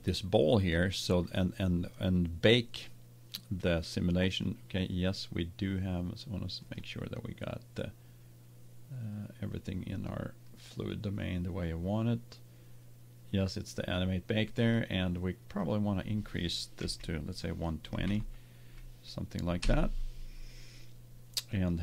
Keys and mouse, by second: 0.1 right click, 4.2-7.2 right drag, 7.2 click, 7.7 middle click, 8.1 click, 10.4-12.7 drag, 15.6-17.5 drag, 21.7-21.8 drag.